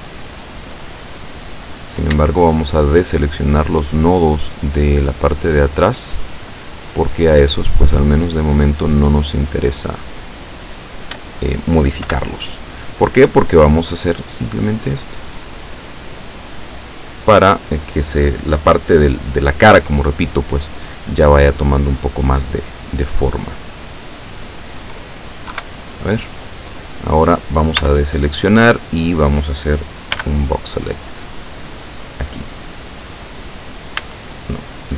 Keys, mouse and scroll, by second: 1.1-2.1 middle drag, 2.9 shift+right click, 3.6 shift+right click, 4.3 shift+right click, 5.4 shift+right click, 5.8 shift+right click, 6.9 shift+right click, 7.9 shift+right click, 8.3 shift+right click, 9.1 shift+right click, 10.0 shift+right click, 10.8 shift+right click, 12.1 KP_7, 13.8-16.4 drag, 23.6-25.3 middle drag, 25.6 KP_7, 27.9 a, 30.2 b, 31.1-32.5 drag, 34.1 a.